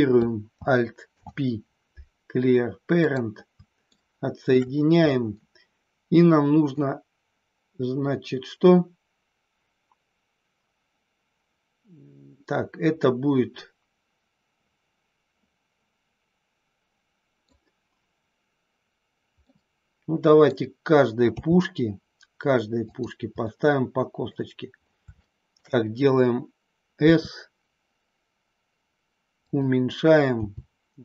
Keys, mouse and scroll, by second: 1.0 alt+p, 3.9 shift+middle click, 5.0-6.7 middle drag, 13.0-17.4 middle drag, 19.4-20.5 middle drag, 21.3 g, 22.9 click, 23.4 scroll up 1, 23.5 middle click, 25.1 shift+middle click, 26.9 s, 30.3 g.